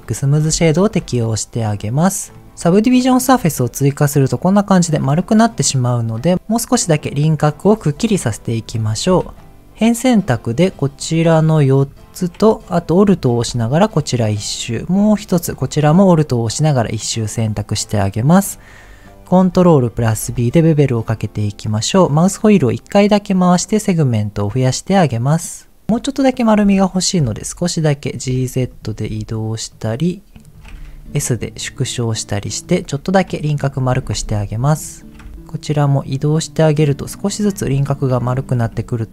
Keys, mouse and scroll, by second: 0.5 middle click, 2.3 middle click, 2.5 click, 2.6 middle click, 3.4 click, 3.6-4.9 middle drag, 5.0-6.2 scroll up 4, 8.8 Tab, 9.4 shift+middle click, 9.5 ctrl+z, 9.5 click, 10.5 click, 11.0 shift+click, 11.3 shift+click, 11.7 shift+click, 13.0 alt+shift+click, 13.6 middle click, 14.8 alt+shift+click, 15.9-17.0 middle drag, 17.1-18.4 scroll up 2, 20.0 ctrl+b, 22.5-23.6 scroll up 1, 25.8 alt+click, 26.9 middle click, 27.1 g, 27.3 z, 28.1 click, 28.6 alt+click, 29.2 alt+shift+click, 29.7 alt+shift+click, 30.4 alt+shift+click, 31.0 s, 32.6 click, 33.3 shift+middle click, 33.6-34.4 scroll up 2, 34.7 alt+click, 35.3 g, 35.3 z, 36.7 click, 37.0 middle click, 37.8 alt+click, 38.4 g, 38.5 z.